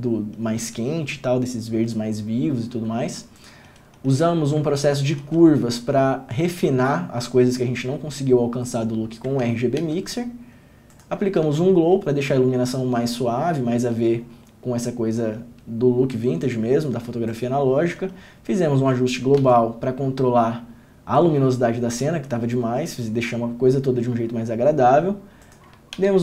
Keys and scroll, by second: 10.0 ctrl+d, 11.6 ctrl+d, 19.6 ctrl+d, 26.1 ctrl+d.